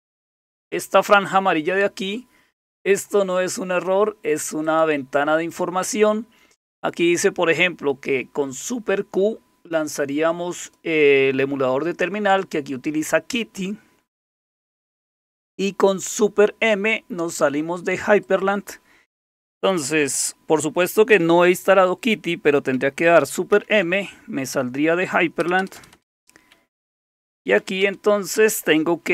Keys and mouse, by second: 0.5 click, 4.7 click, 5.5 click, 10.6 click, 18.2-23.5 drag, 23.5 super+m, 25.4 Return, 25.6 Return, 25.8 Return, 25.9 Return, 26.8-28.1 typing.